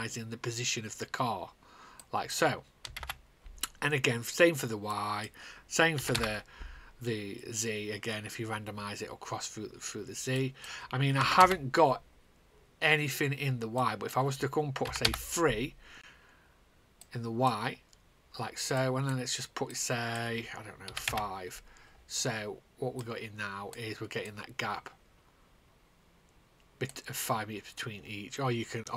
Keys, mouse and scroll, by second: 2.7 KP_0, 2.9 KP_0, 3.5 Return, 3.5 KP_0, 4.9 click, 5.5 click, 5.9 KP_2, 6.7 Return, 10.9 click, 11.2 KP_0, 12.0 Return, 13.7 click, 14.3 click, 14.8 KP_3, 15.6 Return, 16.9 click, 19.3 click, 20.8 5, 21.6 Return, 22.9 click, 23.5 click.